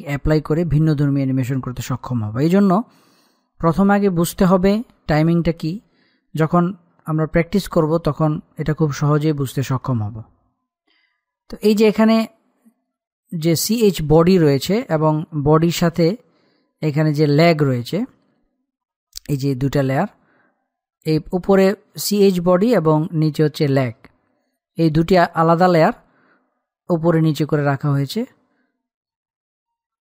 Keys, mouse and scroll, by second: 11.1-11.4 scroll up 1, 11.4-13.3 middle drag, 13.3 click, 14.4-14.9 scroll down 1, 17.1 scroll down 1, 19.3 click.